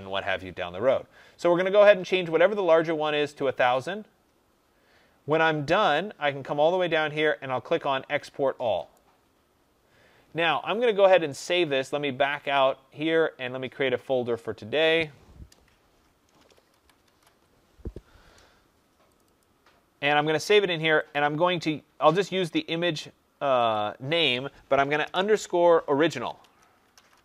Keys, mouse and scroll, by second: 8.8 click, 12.5 click, 16.0-17.6 typing, 17.7 Return, 19.1 click, 19.3 click, 21.0 click, 22.8 typing, 23.6 click, 24.9-27.2 typing.